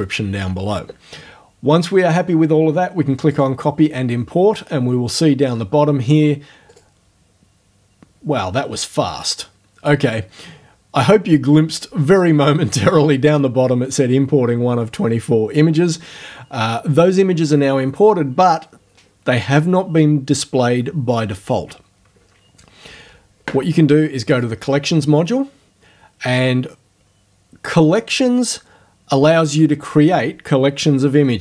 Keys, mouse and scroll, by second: 3.3 click, 6.7 click, 24.3 click.